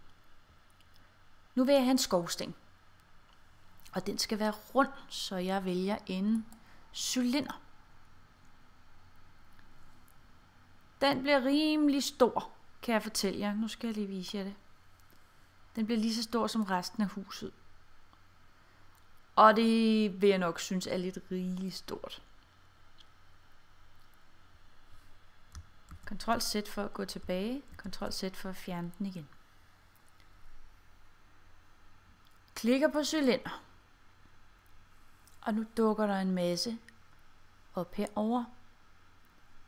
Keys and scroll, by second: 25.9 super+z, 27.8 super+z.